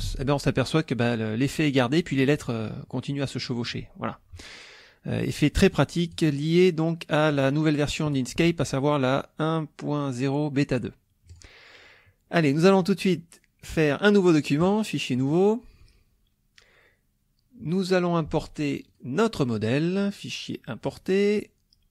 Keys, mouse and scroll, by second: 0.0-0.6 typing, 6.1 click, 7.3 click, 11.3 click, 12.3 middle click, 14.6 click, 15.2 click, 18.9 click, 19.1 click, 20.0 click, 20.9 click.